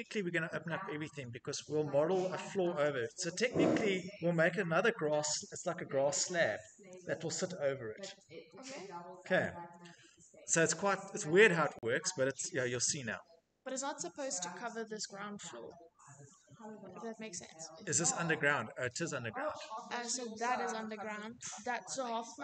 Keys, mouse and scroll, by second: 0.7-2.0 scroll, 10.3 scroll, 11.5 middle click, 11.6 middle click, 11.6 middle click, 12.3 Escape, 13.9 middle click, 14.0 middle click, 14.1 click, 16.8 middle click, 16.9 middle click, 17.0 middle click, 21.1 middle click, 21.6 middle click, 21.6 middle click, 21.7 middle click, 21.8 middle click, 22.3 middle click.